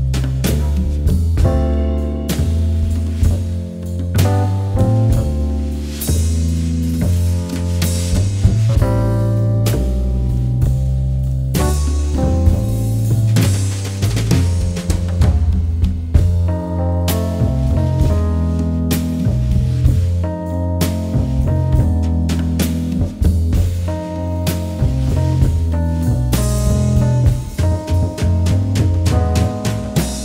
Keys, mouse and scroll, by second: 9.7 click, 11.6 click, 14.3 click, 18.1 click, 21.2 click, 25.3 click, 28.4 click, 29.5 click.